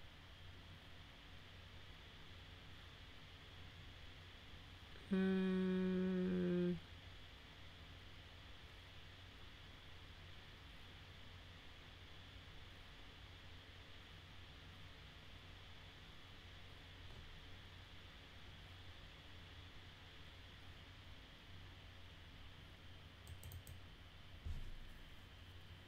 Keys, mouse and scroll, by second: 23.2 click, 23.5 click.